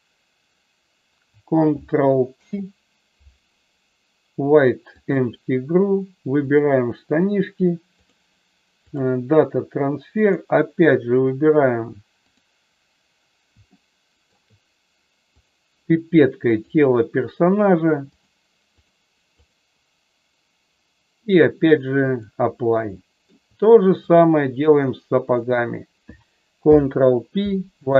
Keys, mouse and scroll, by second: 2.3 ctrl+p, 6.4 click, 8.1 click, 10.1 click, 13.7 shift+middle click, 15.3 click, 18.7 click, 19.4 click, 21.3 click, 22.9 shift+middle click, 24.0 click, 25.2 shift+click, 26.5 ctrl+p.